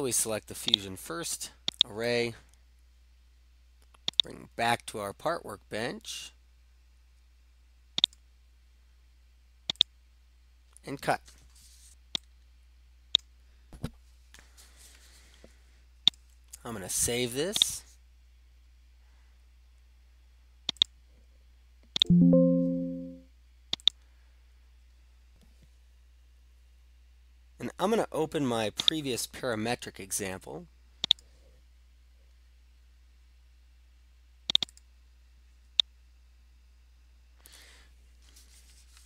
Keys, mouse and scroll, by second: 0.7 click, 2.0 ctrl+click, 8.1 click, 9.9 click, 13.2 right click, 13.2 middle click, 16.1 click, 17.6 click, 18.7-30.1 drag, 31.1-34.9 drag.